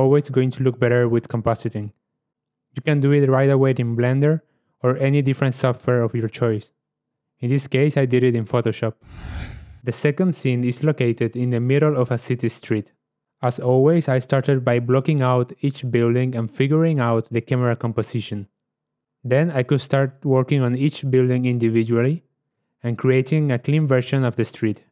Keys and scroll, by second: 16.4 KP_0, 19.2 alt+F8.